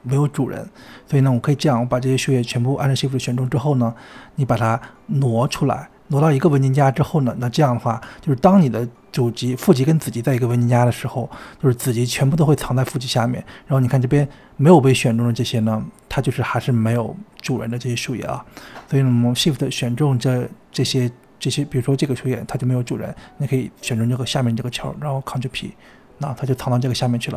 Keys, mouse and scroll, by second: 0.5 click, 1.0-2.3 scroll up 17, 2.3 shift+click, 2.8-4.8 scroll down 16, 4.8 drag, 6.9-7.5 scroll up 2, 9.9 click, 10.6-11.0 scroll down 1, 11.0-11.5 scroll up 2, 11.5 click, 12.6 Delete, 13.5 click, 15.2-18.2 scroll down 1, 18.4 shift+click, 19.8 click, 23.0 shift+click, 24.2 ctrl+p, 26.7 click.